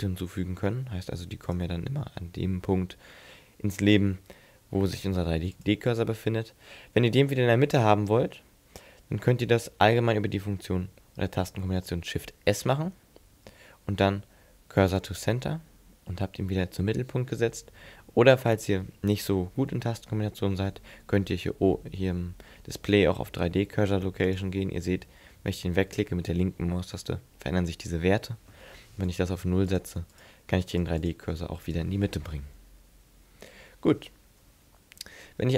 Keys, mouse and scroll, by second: 0.7 shift+a, 5.1 x, 12.4 shift+s, 24.3 click, 29.1 click, 30.1 click, 31.0 click, 34.4 n, 35.2-35.5 scroll up 4.